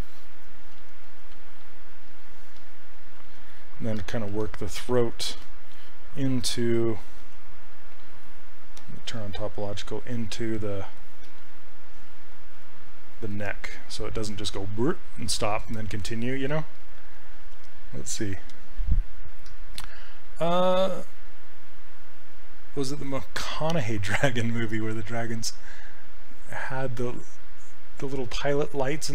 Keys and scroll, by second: 0.8 s, 3.4 ctrl+z, 4.4 s, 6.7 ctrl+z, 7.2 s.